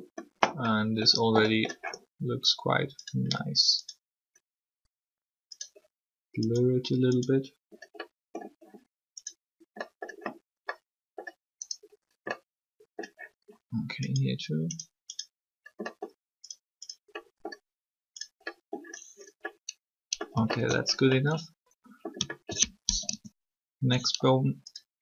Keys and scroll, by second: 23.0 alt+shift+3.